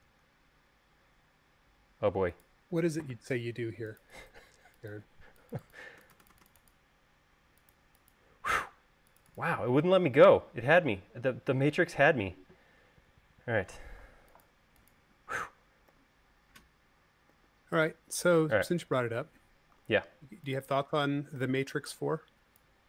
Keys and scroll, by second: 0.0-0.6 typing, 0.8 Escape, 6.1-6.7 typing, 16.1 u, 17.6 u, 20.0 v.